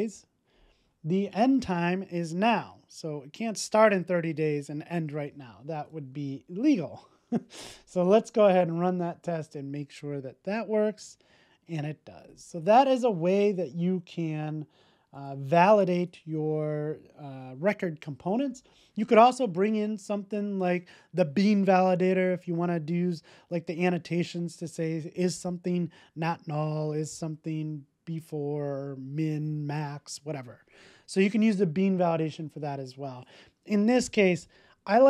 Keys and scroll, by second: 6.4 super+s.